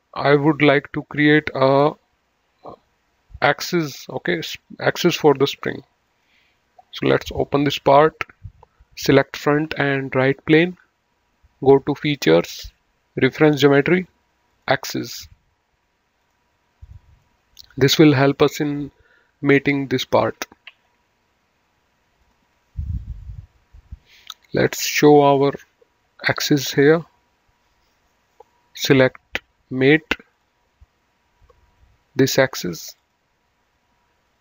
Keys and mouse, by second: 6.0 click, 7.1 click, 9.1 click, 10.3 ctrl+click, 12.1 click, 13.6 click, 16.1 click, 17.2 middle click, 19.5 ctrl+s, 20.7 ctrl+w, 22.2 click, 25.0 click, 30.3 click, 33.0 click.